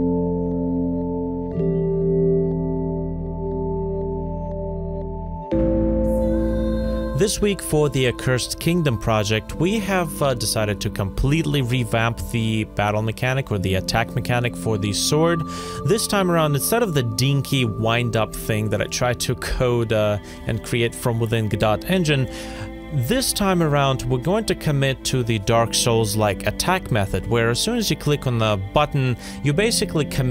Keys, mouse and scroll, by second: 5.5 alt+middle click, 5.5 Tab, 5.9 Tab, 6.1 middle click, 6.1 shift+click, 6.3 ctrl+p, 6.9 p, 8.1 ctrl+Tab, 8.3-21.7 typing, 8.5 scroll down 1, 8.6 middle click, 8.8 middle click, 8.9 scroll up 1, 9.0 middle click, 9.0 scroll down 1, 9.1 middle click, 10.6 Return, 10.7 scroll up 1, 11.0 Return, 11.4 ctrl+c, 11.7 Return, 11.7 ctrl+c, 12.3 scroll up 1, 12.4 scroll down 1, 12.4 ctrl+z, 12.6 scroll up 1, 12.7 scroll down 1, 14.2 scroll down 1, 14.5 middle click, 14.9 Escape, 15.2 scroll down 1, 15.3 middle click, 15.5 Return, 15.7 Return, 16.4 scroll down 1, 17.8 scroll up 1, 18.5 ctrl+z, 20.5 ctrl+z, 20.6 middle click, 20.8 middle click, 20.9 ctrl+z, 21.1 ctrl+z, 21.2 middle click, 21.5 ctrl+z, 22.1 ctrl+z, 22.3 scroll down 1, 22.8-23.8 typing, 23.2 scroll down 1, 23.5 shift+middle click, 23.6 middle click, 23.8 right click, 24.0 right click, 24.0 middle click, 24.1 ctrl+z, 24.4 middle click, 24.5 ctrl+z, 24.7 middle click, 24.9 ctrl+Tab, 25.2 middle click, 25.3-30.3 typing.